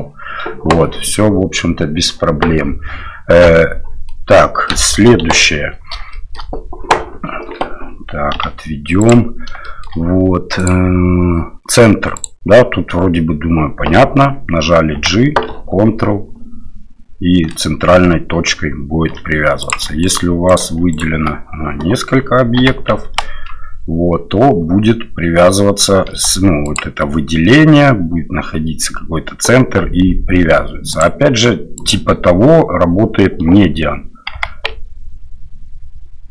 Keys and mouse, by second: 4.1-4.5 middle drag, 4.7 middle click, 5.2 KP_7, 6.1 shift+middle drag, 8.3 g, 9.6 shift+middle drag, 10.6-12.5 drag, 14.9 g, 20.0 shift+right click, 20.5 shift+right click, 20.9 shift+right click, 22.6 g, 31.0-32.3 drag, 34.3 g.